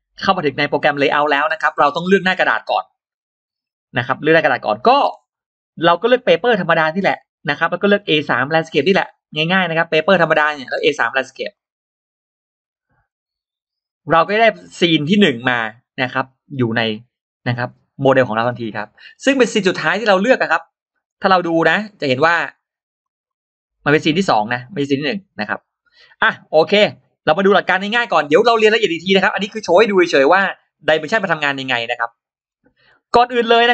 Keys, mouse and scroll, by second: 6.9 click, 9.9 click, 11.4 click, 14.0 scroll down 2, 14.4 click, 14.7-15.3 scroll up 2, 22.0 click, 22.8 click, 24.4 click, 31.5 click, 32.2-32.5 scroll down 2, 33.0 scroll up 2.